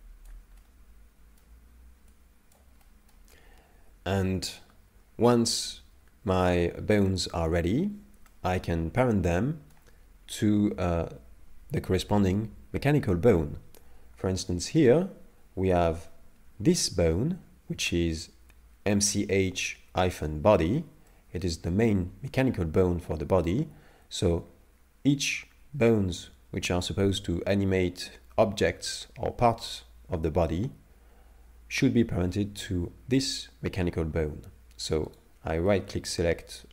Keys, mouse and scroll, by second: 0.6 middle click, 2.1 click, 2.8 middle click, 8.3 middle click, 14.8 right click, 21.1 middle click, 35.1 right click, 35.7 middle click.